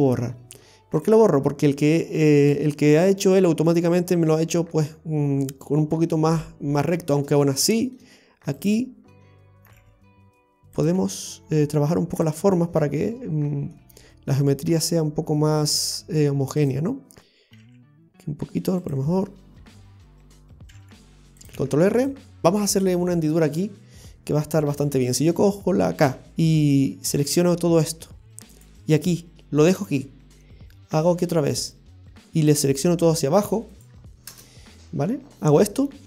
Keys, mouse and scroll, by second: 7.1-7.6 scroll up 3, 7.7 shift+middle click, 8.6 right click, 9.7 g, 12.8 scroll up 1, 12.8 g, 13.1-13.8 scroll down 4, 13.8 middle click, 16.0 scroll up 1, 16.6 right click, 17.6 g, 21.6 ctrl+r.